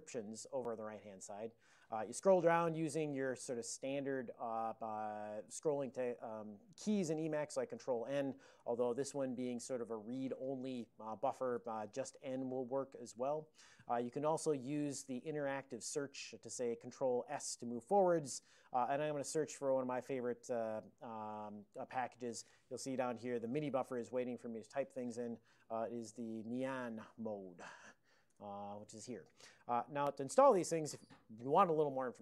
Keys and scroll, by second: 2.2 ctrl+n, 2.7 ctrl+n, 2.8 ctrl+n, 3.5 ctrl+p, 3.8 ctrl+p, 4.2-4.6 ctrl+p, 4.6 ctrl+n, 4.7 ctrl+n, 7.6 ctrl+n, 7.8 ctrl+n, 8.0 ctrl+n, 11.8-13.3 typing, 17.4 ctrl+s, 25.5-26.7 typing.